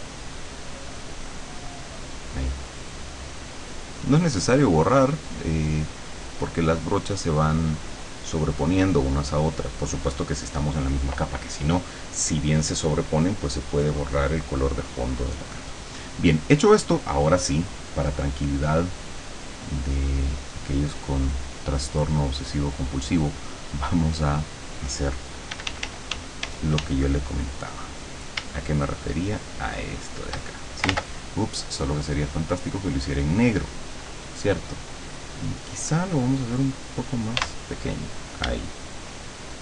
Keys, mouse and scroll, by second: 0.5-10.5 drag, 18.5 click, 20.5 click, 21.4 click, 22.6 click, 24.2 click, 25.5 d, 28.7-30.5 shift+drag, 30.9 ctrl+z, 32.1 click, 33.1 click, 37.4 d, 38.9-39.6 shift+drag.